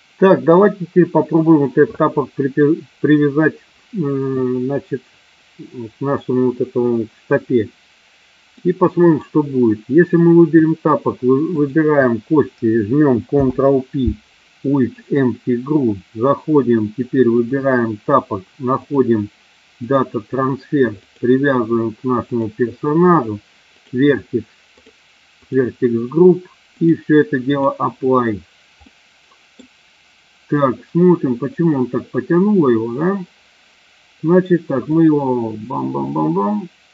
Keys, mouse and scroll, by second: 8.5-9.2 middle drag, 11.5 shift+click, 13.3 ctrl+p, 17.4 click, 18.9-20.0 drag, 21.0 click, 23.6 click, 26.6-27.7 drag, 28.9-29.6 middle drag, 34.8-36.9 drag.